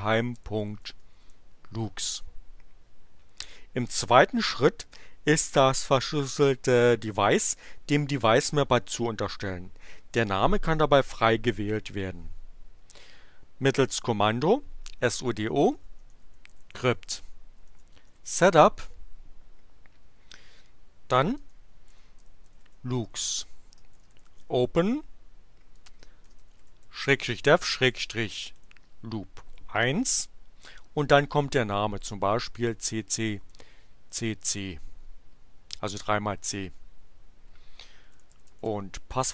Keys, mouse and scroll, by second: 0.0-1.4 typing, 14.6-18.6 typing, 21.4-29.0 typing, 31.1 space, 32.2 c, 33.3 Return, 37.9-39.3 typing.